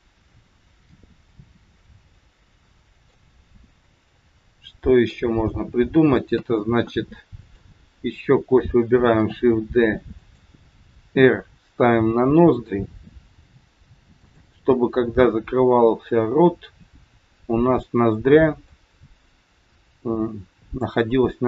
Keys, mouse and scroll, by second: 4.1 middle click, 6.2 KP_3, 7.4 click, 9.1 shift+d, 11.1 r, 13.3 g, 15.6 scroll up 2, 16.2 scroll up 1, 17.5 middle click, 19.3 click.